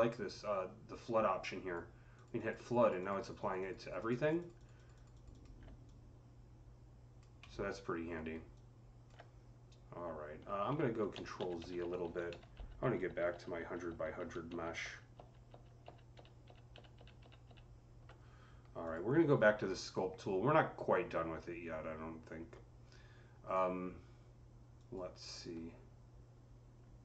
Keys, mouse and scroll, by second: 1.3 alt+click, 1.3 alt+middle click, 2.0 alt+click, 2.7 click, 2.9 double click, 3.1 click, 3.3 click, 3.4 double click, 3.5 double click, 3.6 double click, 3.7 click, 3.8 click, 4.1 double click, 4.3 click, 4.4 click, 4.6 double click, 4.8 click, 5.0 click, 5.2 double click, 5.7-8.5 drag, 7.3 alt+middle click, 8.5-11.3 alt+drag, 10.7 ctrl+z, 11.0 ctrl+z, 11.3 ctrl+z, 12.2 ctrl+z, 12.4 ctrl+z, 12.9 ctrl+z, 13.2 ctrl+z, 15.4 ctrl+z, 16.0 ctrl+z, 18.7 click, 24.6 click.